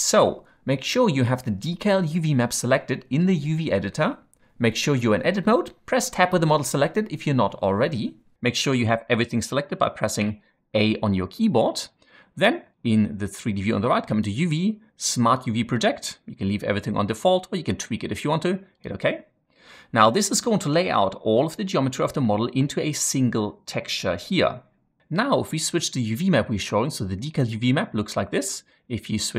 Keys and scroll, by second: 5.5 Tab, 6.0 Tab, 8.6 a, 8.8 a, 10.1 a.